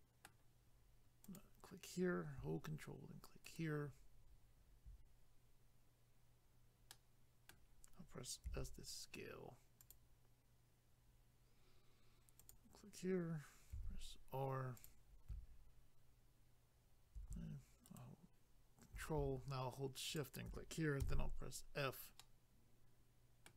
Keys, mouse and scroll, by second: 1.3 click, 3.5 ctrl+right click, 6.9 middle click, 8.5 s, 9.8 click, 12.4 click, 13.7 r, 14.8 click, 17.9 ctrl+right click, 20.0 shift+click, 21.0 f.